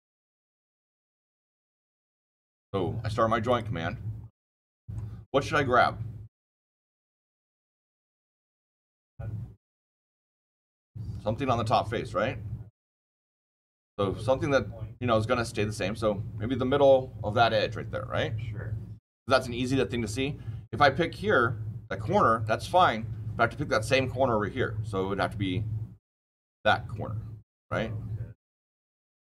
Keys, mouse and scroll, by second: 3.4 click, 4.4 middle click, 10.8-15.1 scroll down 8, 15.1 scroll down 1, 22.3 click, 22.9 scroll down 6, 23.2 scroll up 7, 24.5 click, 24.5-25.9 scroll, 25.9 click, 25.9 scroll down 10, 26.1 scroll, 29.1 click.